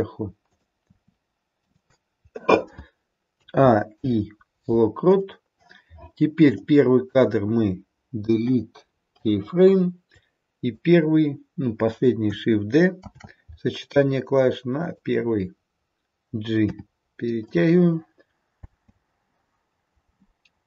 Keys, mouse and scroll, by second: 0.4 click, 0.9 r, 3.2 a, 3.9 i, 8.4 Delete, 10.2 click, 12.9 shift+d, 16.6 g, 18.7 space.